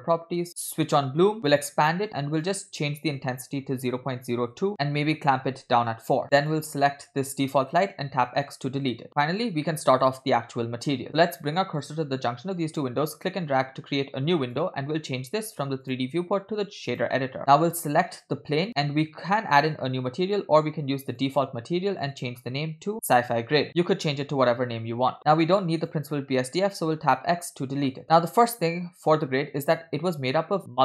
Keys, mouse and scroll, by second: 0.9 click, 1.6 click, 2.6-6.0 drag, 6.5 click, 8.1 x, 9.1 middle click, 9.9 shift+middle click, 12.9-14.7 drag, 15.5 click, 15.9-17.1 drag, 17.4 scroll down 3, 19.1-20.0 scroll up 2, 20.4-21.4 drag, 22.2-23.7 drag, 25.1 middle click, 25.3 scroll down 2, 25.9 click, 27.5 x, 27.9 middle click.